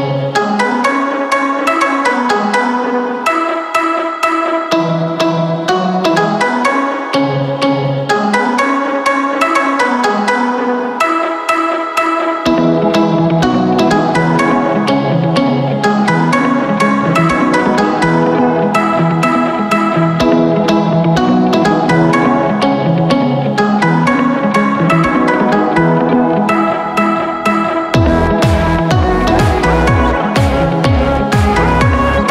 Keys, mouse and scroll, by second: 5.9-8.1 drag, 8.1-10.1 middle drag, 11.7-13.8 drag, 13.8-15.8 middle drag, 16.3-18.3 middle drag, 18.3 Tab, 20.1-21.8 middle drag, 21.8 Tab, 22.8 middle click, 23.2-24.0 scroll down 1, 24.0-25.2 scroll down 1, 25.2-27.2 scroll down 1, 27.2-28.4 scroll down 1, 28.4-29.5 scroll down 1, 29.5 scroll down 1, 29.7-31.0 middle drag, 31.0 shift+click, 31.2-32.3 middle drag.